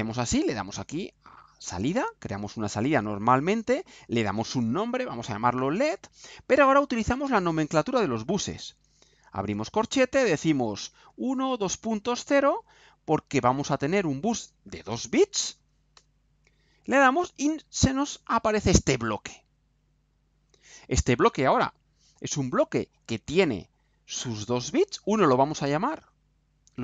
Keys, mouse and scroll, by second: 1.9 click, 3.3 click, 4.9-6.0 typing, 11.0 1, 11.4 shift+., 12.1 shift+0, 15.9 Return, 20.1 click, 25.2 click.